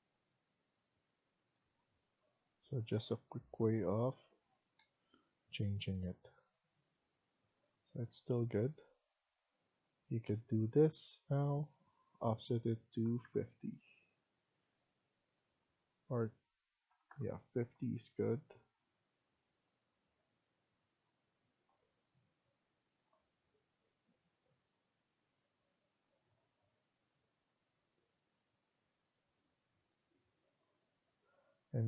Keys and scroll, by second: 1.7 Right, 2.0 Right, 2.2 Right, 2.3 Right, 2.5 Right, 2.6 Right, 2.8 Right, 3.0 Right, 3.2 Right, 3.4 Right, 3.6 Right, 4.4 Escape, 8.0 Escape, 10.7 Escape, 12.7-13.7 typing, 16.5-17.3 typing, 31.0 Escape.